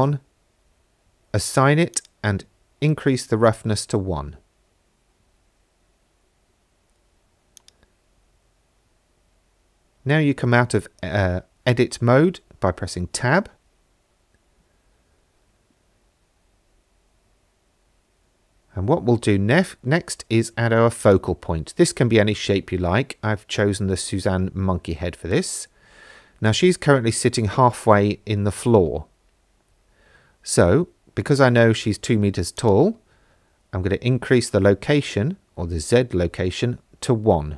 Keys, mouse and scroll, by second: 2.0-3.0 drag, 7.6 click, 9.4 Tab, 10.4 shift+middle click, 12.9 ctrl+s, 18.5 shift+a, 23.0-23.5 scroll up 4, 23.7 middle click, 27.5 KP_1, 28.7-30.7 scroll up 3, 32.6-34.5 drag, 36.9 shift+middle drag.